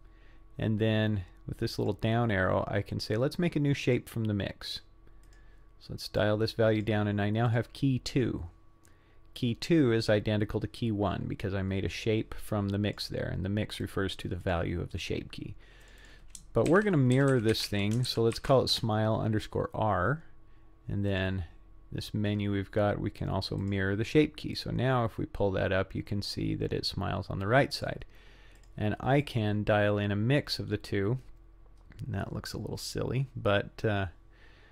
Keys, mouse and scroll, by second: 1.8-4.0 drag, 5.3 click, 6.2 click, 7.5 click, 9.4-13.0 drag, 13.8 click, 14.4 click, 15.9 click, 16.0-19.5 drag, 21.1-23.8 drag, 24.6-27.9 drag, 28.6 click, 29.2-34.7 drag.